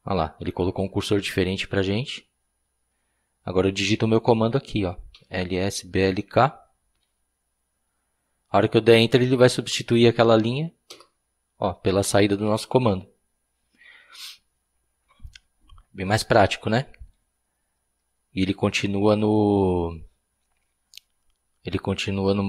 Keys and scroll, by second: 4.9-7.5 typing, 10.9 Return.